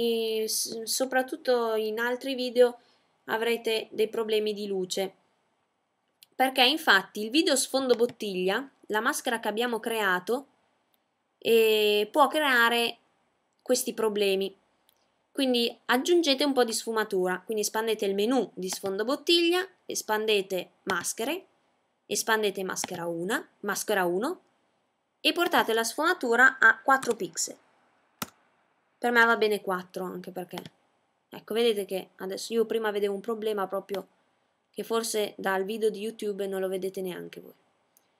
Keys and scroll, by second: 25.4 4.